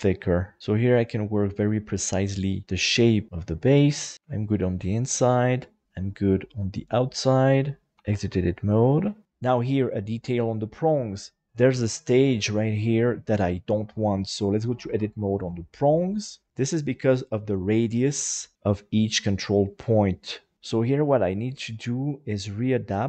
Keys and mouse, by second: 1.9-4.1 middle drag, 4.6-5.8 middle drag, 6.1-7.5 middle drag, 7.9 Tab, 9.0 shift+middle click, 10.1 right click, 10.5 middle click, 11.9 middle click, 14.9 Tab, 16.3 right click, 18.4 right click, 18.9 right click, 20.0 right click, 21.3-23.0 drag.